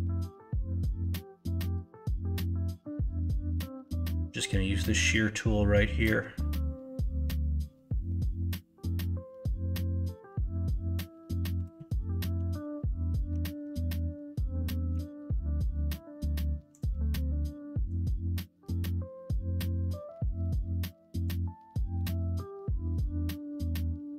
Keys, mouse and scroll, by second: 14.9 w, 17.9-24.1 drag.